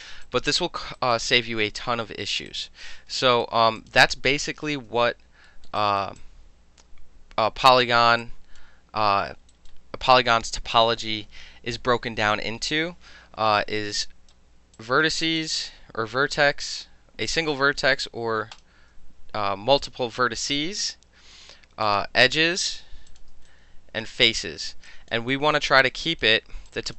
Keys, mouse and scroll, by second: 0.3-0.8 alt+drag, 1.0 alt+right click, 1.2 alt+middle click, 1.3 alt+click, 1.8 alt+middle click, 2.5 alt+click, 2.6 alt+right click, 5.5 alt+middle click, 5.8 alt+right click, 6.2-7.9 alt+drag, 7.9 alt+middle click, 8.3 alt+click, 8.6 alt+middle click, 9.6 alt+right click, 9.7-10.3 alt+middle drag, 13.8-14.4 right drag, 14.8 click, 15.3 shift+click, 15.4-17.3 shift+middle drag, 17.3 click, 17.4 middle click, 18.6 shift+click, 20.6-21.4 right drag, 21.9 click, 22.6 shift+click, 22.6-23.1 shift+middle drag, 23.1 shift+click, 23.2 shift+middle drag, 23.5-24.1 drag, 24.1 middle drag, 24.3 click, 24.4-24.9 middle drag, 24.9 alt+click, 25.2 alt+middle drag, 25.4 alt+right click, 25.6-26.0 alt+middle drag, 26.0-26.9 alt+drag.